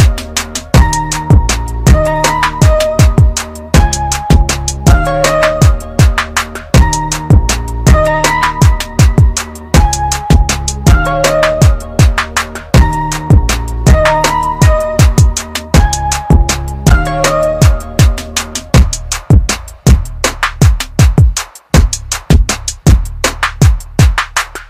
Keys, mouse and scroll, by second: 1.1 click, 3.6 scroll down 1, 4.3 click, 5.0 scroll up 1, 6.4 click, 9.0 ctrl+z, 9.8 scroll down 1, 14.0-14.7 scroll up 1, 14.7 scroll down 1, 15.5-15.8 scroll up 1, 17.6 click, 21.4 right click.